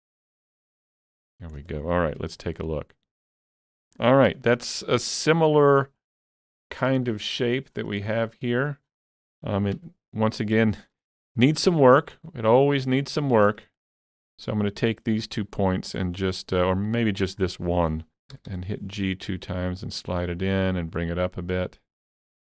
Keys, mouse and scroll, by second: 0.6 click, 1.6-2.1 scroll down 1, 2.1-2.8 scroll down 2, 2.2 alt+z, 2.8 middle click, 4.3 Tab, 6.8 scroll up 2, 7.7 scroll up 2, 8.1 shift+middle click, 8.9 scroll up 2, 9.8 Tab, 10.6 shift+middle click, 11.0 scroll up 2, 11.9 click, 12.2-18.3 shift+middle drag, 13.4 shift+click, 18.3 g, 18.5 g, 20.1 click, 20.7-22.5 drag.